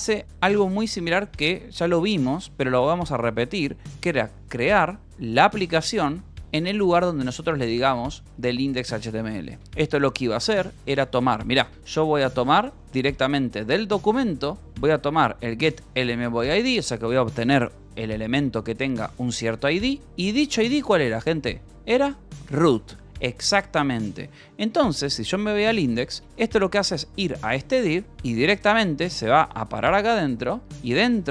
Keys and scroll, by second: 4.8 e, 5.7 Escape, 6.0-8.1 typing, 9.6 Escape, 10.5 h, 11.9-13.2 typing, 14.3-15.7 typing, 18.2 Escape, 20.7-21.6 typing, 23.0 Escape, 23.6-26.0 typing, 24.8 Return, 27.4 shift+v, 28.2 Escape, 28.7 f, 29.7 a, 30.9 shift+Return, 31.2-31.3 typing.